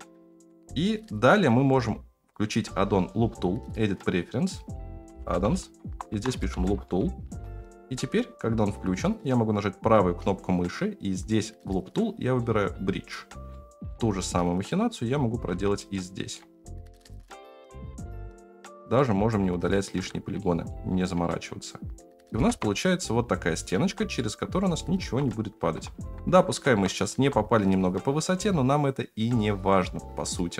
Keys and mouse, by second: 0.3 ctrl+z, 0.8 right click, 2.3-3.1 drag, 10.4-12.5 right drag, 13.5 middle click, 14.6 click, 15.5 3, 15.9 middle click, 17.0 click, 17.4-18.4 drag, 18.9 middle click, 19.9 Tab, 20.4 middle drag, 21.2-21.9 middle drag, 22.4 KP_0, 23.8 alt+z, 24.1-24.8 middle drag, 25.0 alt+z, 25.8 alt+z, 26.3 alt+z, 26.6 KP_0, 27.1 alt+z, 29.3-29.8 middle drag.